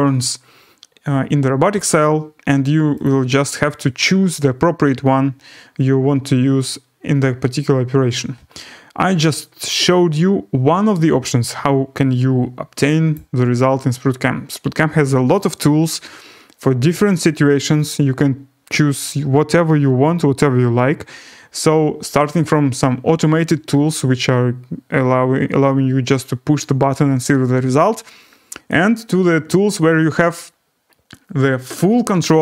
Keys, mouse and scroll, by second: 0.3-0.9 scroll, 1.7 scroll, 3.0 click, 13.1 click, 13.6-17.8 scroll, 18.2 scroll up 6, 24.7 scroll up 4, 24.9 middle click, 24.9 scroll, 28.0-29.7 scroll.